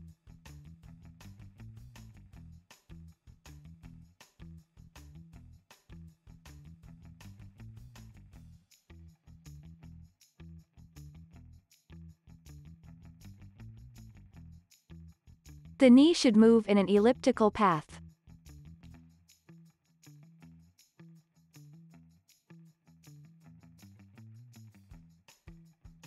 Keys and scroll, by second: 2.5 space, 7.4 super+Down, 8.3 super+Right, 8.9 super+Down, 9.3 z, 9.7 alt+x, 10.8 alt+z, 11.7 alt+x, 13.2 super+Down, 14.8 alt+z, 15.2 alt+x, 19.2 space, 23.2 space.